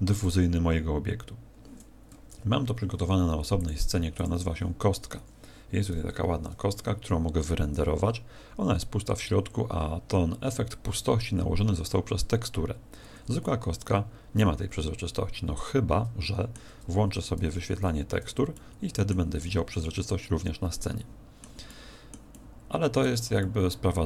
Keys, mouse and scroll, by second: 0.1 click, 2.1 Escape, 3.5 click, 12.7 Escape, 13.4 middle click, 17.7 alt+z, 18.5 middle click, 19.4 middle click, 21.7 middle click, 22.3 middle click, 23.4 middle click.